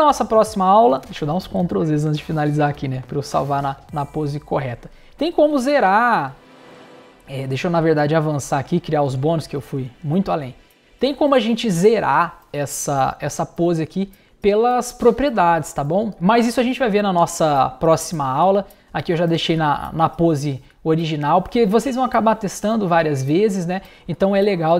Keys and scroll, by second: 0.1 super+z, 6.8 shift+super+z.